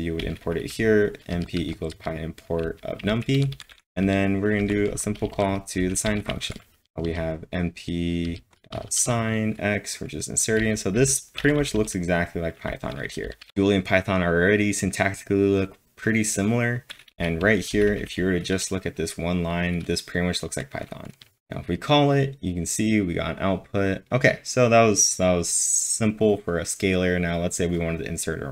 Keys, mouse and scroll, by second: 0.0-7.0 typing, 1.3 click, 2.6 click, 5.3 click, 8.0-8.7 typing, 10.6-13.5 typing, 17.1 typing.